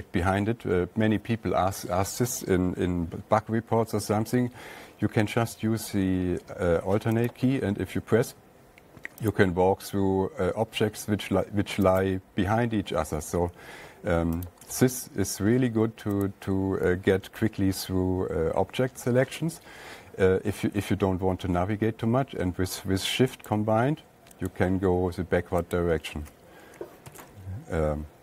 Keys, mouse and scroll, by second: 4.8-9.7 drag, 12.4 alt+click, 14.9 alt+click, 16.7 alt+click, 23.9 click, 25.0 click, 26.2 click, 27.6 alt+Tab.